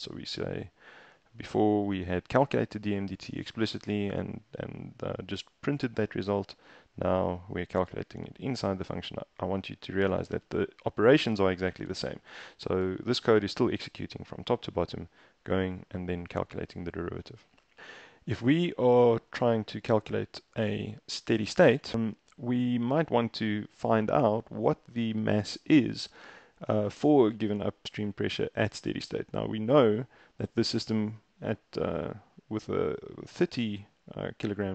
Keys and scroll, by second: 11.3 Down, 11.4 Down, 11.6 Down, 11.8 Down, 11.9 Down, 12.3 Up, 12.5 Up, 12.7 Up, 12.9 Up, 18.6 super+Tab, 28.8 super+Tab.